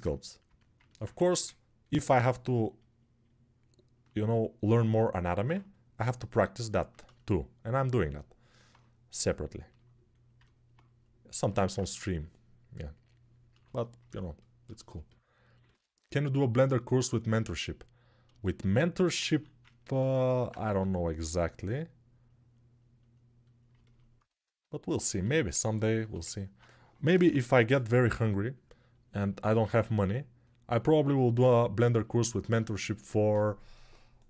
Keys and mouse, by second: 0.9 1, 19.0 alt+q, 20.4 g, 27.0 p, 29.3 1.